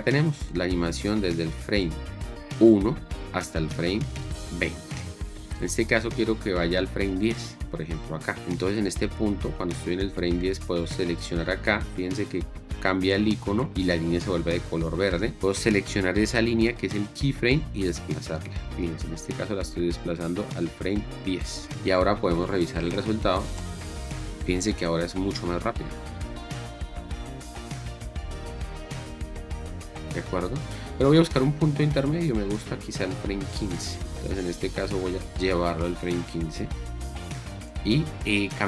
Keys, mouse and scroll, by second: 23.7 space, 30.4 click.